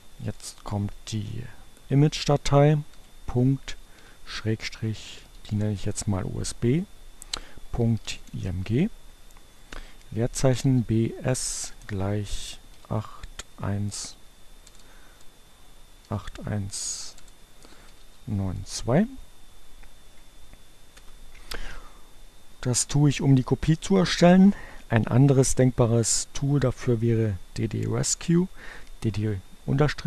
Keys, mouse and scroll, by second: 2.6 ., 2.9 shift+7, 4.6-5.7 typing, 7.1-16.1 typing, 17.4 1, 17.8 2, 20.3 Return.